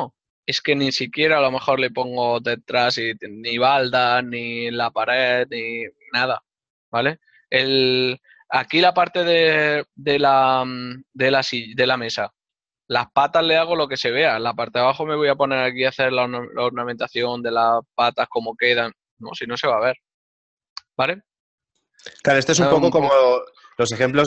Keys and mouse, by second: 20.8 middle click, 21.3 middle click.